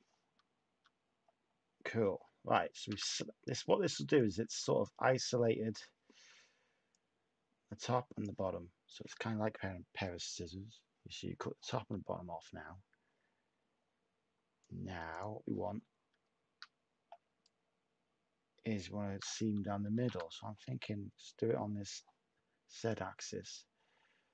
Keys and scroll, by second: 2.8 a, 19.9 a.